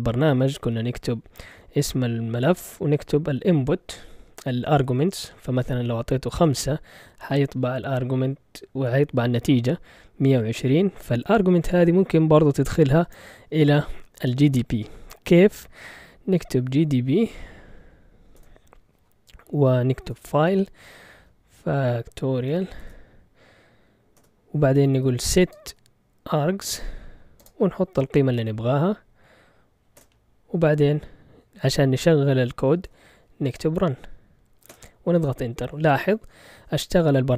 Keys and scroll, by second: 0.6-2.1 typing, 3.3 5, 6.3 Return, 16.3-17.2 typing, 18.3 Return, 19.8-28.3 typing, 29.9 typing, 32.5-33.5 typing, 34.7 typing.